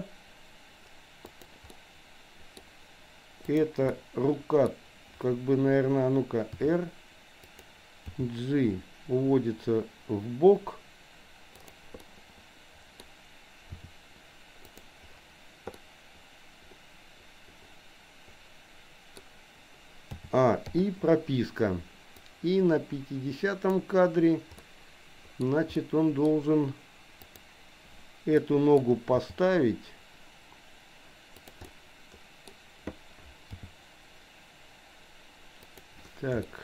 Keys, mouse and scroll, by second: 1.7-2.7 middle drag, 3.6 click, 3.9 middle click, 6.4 r, 8.2 g, 12.1-13.1 middle drag, 13.7 r, 15.8-19.2 middle drag, 20.2 a, 20.7 i, 22.3-23.8 drag, 24.6 middle click, 25.8 middle click, 27.2 click, 28.4 middle click, 29.2 g, 31.7 scroll up 1, 31.8 middle click, 33.6 g, 36.4 shift+middle click.